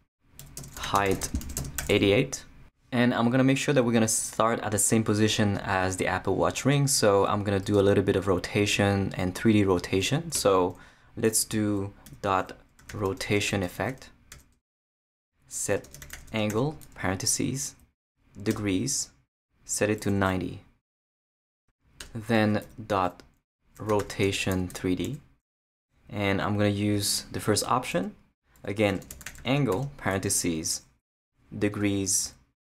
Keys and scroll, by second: 0.1-2.3 typing, 10.3 Return, 12.1-14.3 typing, 14.5 Return, 15.7-17.0 typing, 17.7 Down, 18.5 Return, 20.0 9, 22.0 Return, 22.6-25.5 typing, 27.9 Return, 28.7-30.2 typing, 31.0 Down, 31.7 Return.